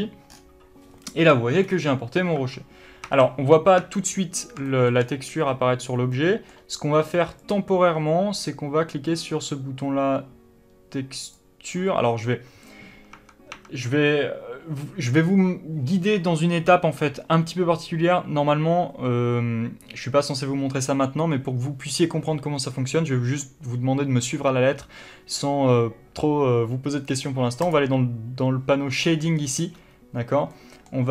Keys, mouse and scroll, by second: 0.0 click, 2.7 Tab, 5.0 shift+middle click, 7.8-31.1 drag, 13.5 Tab.